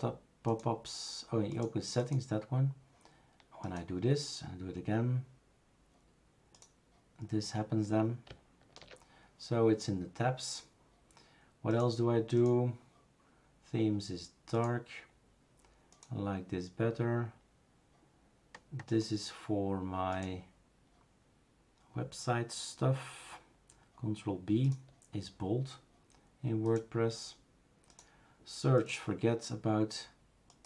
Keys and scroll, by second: 8.9 super+f.